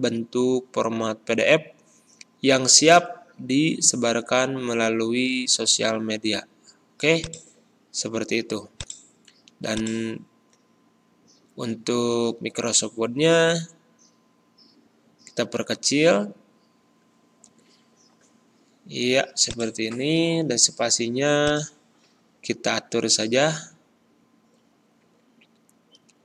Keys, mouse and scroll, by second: 11.3 ctrl+b, 13.5 ctrl+[, 17.4 ctrl+[, 19.4 click, 19.9 a, 21.4 click, 22.7 Delete, 25.1 BackSpace.